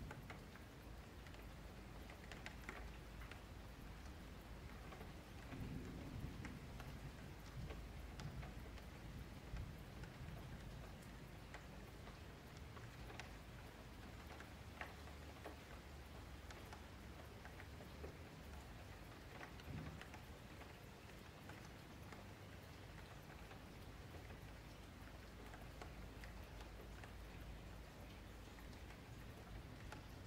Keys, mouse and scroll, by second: 3.0 a, 3.1 a, 3.4 scroll down 3, 4.3-7.0 scroll up 3, 7.0 click, 7.3-7.6 shift+middle drag, 7.6 Tab, 7.9 middle click, 8.8 click, 9.7 Tab, 9.8 click, 10.2 Tab, 10.8 click, 11.4 click, 12.0 click, 13.3 F3, 13.8 click, 14.2 click, 14.4 click, 15.1 Tab, 15.3 click, 15.8 click, 16.3 click, 16.9 Tab, 17.3 click, 17.8 2, 18.3-19.4 middle drag, 19.4 shift+click, 20.0 scroll down 1, 20.0 F3, 20.3-21.5 middle drag, 21.5 ctrl+v, 22.5 shift+middle click, 23.2 ctrl+b, 26.4 middle click, 26.7 shift+scroll up 1, 26.9 shift+middle click, 27.1 Tab, 27.3 scroll up 1, 27.4 middle drag, 27.7 click, 28.3 a, 28.4 a, 28.8 click, 29.0-29.5 shift+scroll up 2, 29.5 Tab, 29.8 1, 30.0 click.